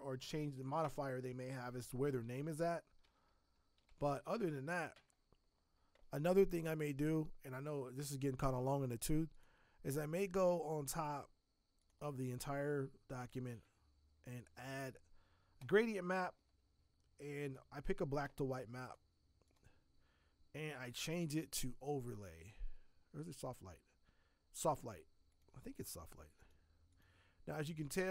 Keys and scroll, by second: 0.8 Tab, 4.9 Tab.